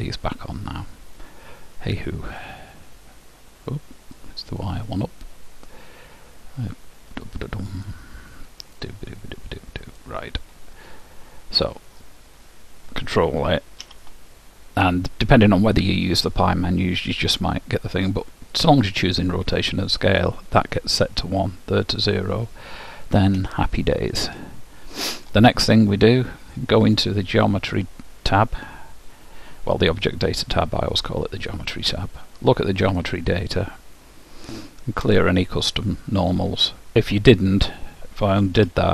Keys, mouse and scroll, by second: 2.2 middle click, 3.6-5.4 middle drag, 7.1 middle click, 7.3-8.7 drag, 8.9-10.5 drag, 12.0-15.5 middle drag, 14.0 ctrl+a, 21.8 middle click, 22.1 scroll down 1, 22.3-26.4 middle drag, 26.9-28.9 drag, 31.9-33.0 scroll down 1, 33.0-35.0 drag, 35.1-36.9 drag, 38.7 ctrl+z.